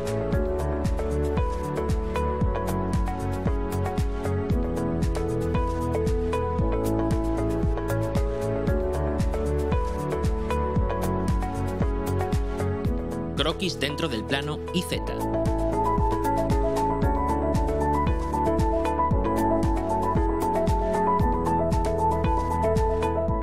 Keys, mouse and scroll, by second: 1.0-3.0 typing, 5.5 click, 7.3 scroll down 1, 8.0-9.1 drag, 9.2-9.6 scroll down 2, 9.9 click, 11.0 scroll up 1, 11.6 scroll up 1, 16.6 click, 18.4 click, 21.0 click, 21.4 click.